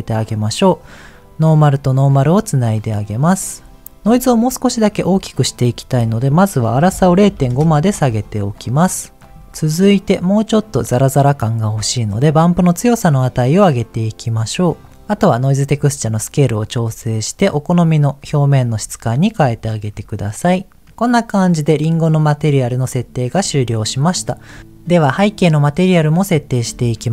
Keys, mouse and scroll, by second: 0.6 click, 0.9-2.1 drag, 3.1-3.7 scroll up 3, 5.6-7.5 drag, 8.9 click, 9.3 middle click, 9.3-10.2 scroll up 2, 12.2-14.7 drag, 15.7-19.0 drag, 19.9-20.8 scroll down 2, 20.8-22.9 middle drag, 24.4 click, 24.9 click, 25.7 middle click.